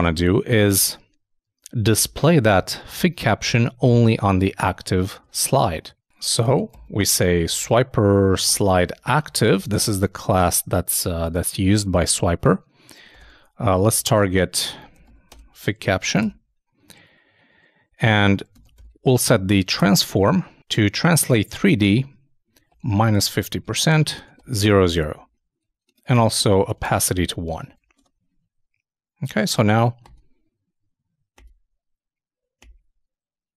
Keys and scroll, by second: 5.2 super+Tab, 9.8 shift+space, 15.8 shift+space, 15.9 shift+[, 16.2 shift+Return, 23.1 shift+0, 23.6 shift+,, 27.6 super+i, 27.8 super+s, 27.9 super+Tab.